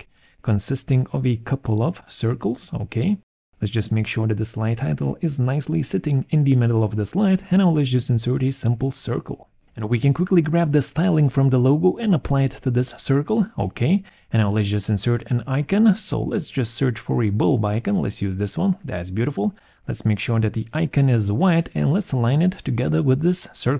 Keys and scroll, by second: 0.9 space, 10.7 ctrl+shift+c, 11.2 ctrl+shift+v, 15.7 b, 15.9 u, 16.1 l, 16.2 b.